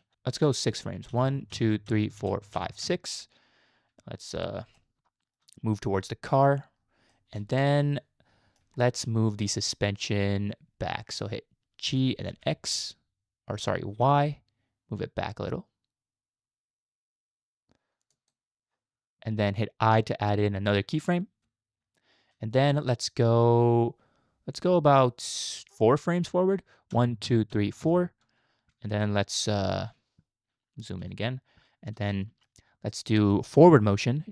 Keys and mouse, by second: 1.1 Right, 1.5 Right, 1.9 Right, 2.2 Right, 2.5 Right, 2.8 Right, 4.8 shift+middle click, 7.1-7.4 middle drag, 7.6-8.7 shift+middle drag, 11.9 g, 21.4 i, 27.0 Right, 27.4 Right, 27.5 Right, 27.8 Right, 29.0 shift+middle click, 31.0 KP_Decimal, 32.1-32.5 shift+middle drag, 33.3 shift+middle drag.